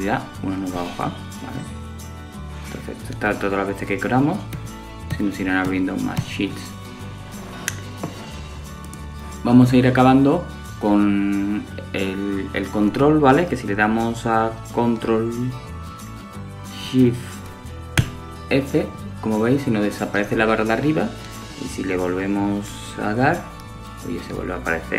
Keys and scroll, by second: 1.7 shift+super+f.